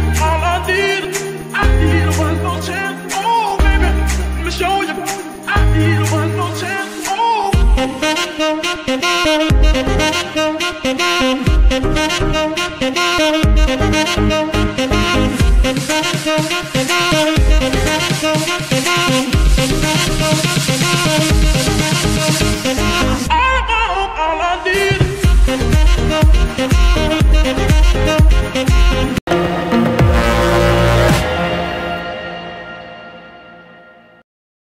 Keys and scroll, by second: 0.1 ctrl+z, 1.1 alt+d, 7.2 shift+s, 12.3 ctrl+d, 14.1 r, 14.2 z, 15.4 Escape, 16.1 r, 17.1 r, 21.4 alt+r, 24.9 alt+d, 26.6 g, 26.8 y, 28.2 Escape, 28.7 shift+Escape.